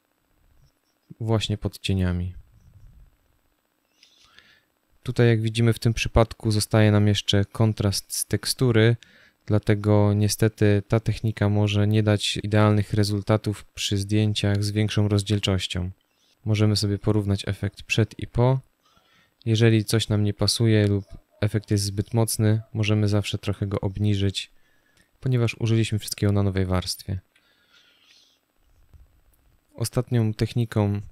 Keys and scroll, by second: 14.4 z, 15.2 space, 26.9 z.